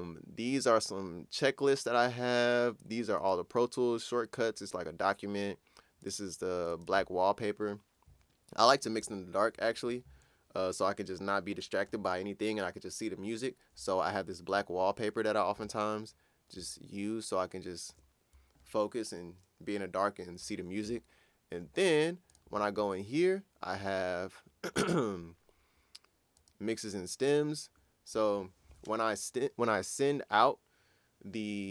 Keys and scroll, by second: 9.0 ctrl+super+f, 15.6 super+Tab.